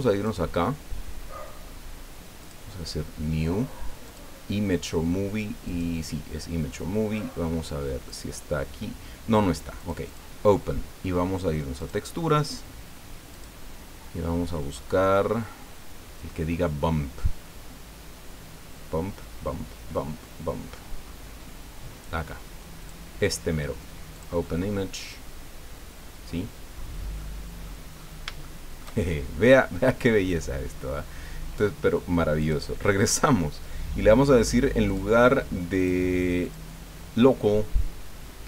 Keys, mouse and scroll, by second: 0.2 click, 2.4 click, 4.0 click, 5.7 click, 8.1 click, 9.8 click, 11.8 click, 13.3 click, 13.9-16.8 scroll down 11, 17.3-18.3 scroll down 4, 18.7-21.6 scroll down 14, 22.8 click, 24.1 click, 26.4-26.7 scroll down 2, 27.2 middle click, 27.9-28.3 scroll up 3, 28.4 shift+click, 29.0-29.3 shift+scroll down 2, 29.5 click, 32.4 click, 34.9 click, 35.8 click, 36.4 click.